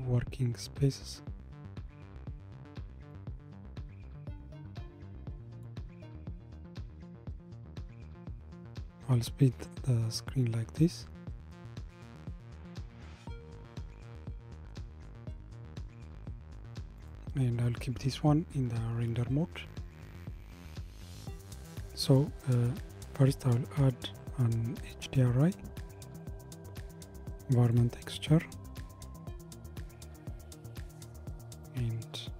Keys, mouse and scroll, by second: 6.6-9.6 drag, 13.9-15.1 middle drag, 15.1 scroll down 2, 17.2 click, 18.8-22.1 scroll up 2, 23.3 click, 26.2-32.3 drag.